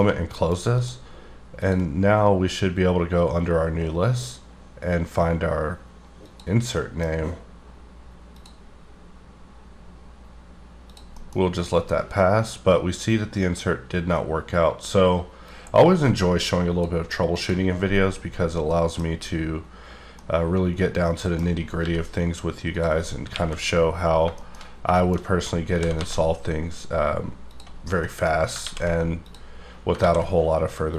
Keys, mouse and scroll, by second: 0.0 shift+scroll down 2, 0.4 middle click, 0.8 click, 1.6 click, 6.2 click, 6.7 middle click, 8.4 click, 10.9 click, 11.1-13.5 scroll up 3, 11.2 middle click, 15.4 click, 17.3 click, 17.9 scroll down 1, 18.2-18.6 scroll up 6, 18.6 middle click, 19.0-20.1 scroll up 5, 20.1 middle click, 21.5 scroll down 1, 21.7 g, 22.7 click, 23.3 KP_1, 23.9-25.7 scroll up 13, 24.3 shift+middle click, 24.9 shift+middle click, 25.7 g, 26.0 z, 27.5 click, 27.7-28.4 scroll down 8, 28.0 middle click, 28.6 ctrl+a, 29.2 click, 30.0 ctrl+a.